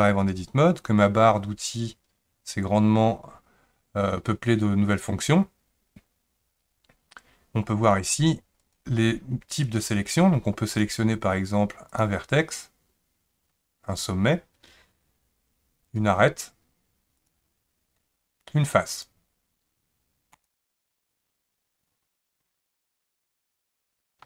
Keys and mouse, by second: 7.9 click, 9.7 click, 10.7 click, 11.9 click, 15.8 click, 18.9 click, 20.3 click.